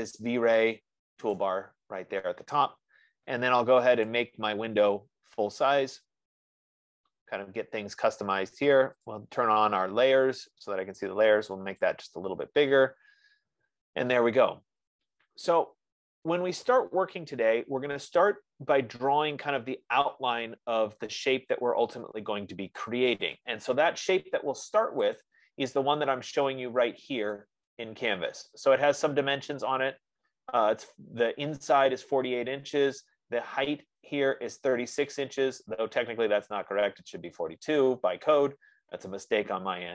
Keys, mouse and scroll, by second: 2.3 click, 5.4 click, 9.4 click, 12.3 click, 14.1 F15, 16.1 click, 26.0 click, 27.8 click, 31.5-32.7 drag.